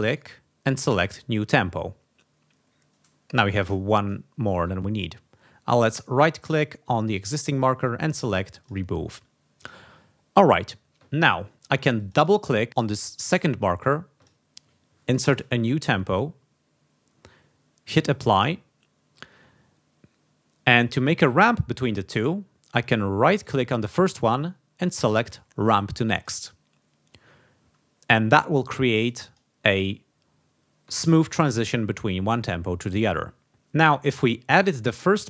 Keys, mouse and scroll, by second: 0.0 right click, 1.0 click, 5.6 right click, 6.4 click, 7.1 right click, 8.5 click, 11.9 click, 12.6 click, 14.1 click, 15.1 BackSpace, 15.3 0, 18.2 click, 23.3 right click, 26.1 click, 29.0 click, 35.0 click.